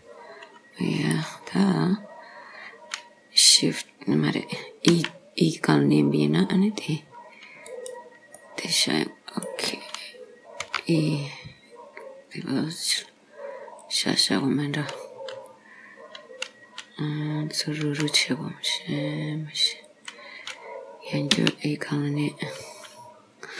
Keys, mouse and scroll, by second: 1.6 scroll down 2, 5.0 e, 8.5 middle click, 10.7 g, 17.9 g, 21.4 e.